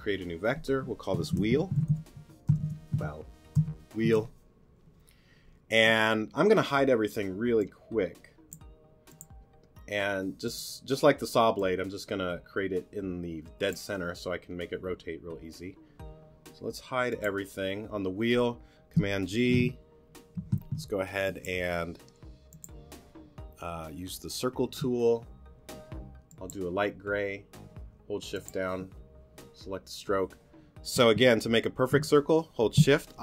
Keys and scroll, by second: 1.3 w, 4.0 Return, 19.3 super+g.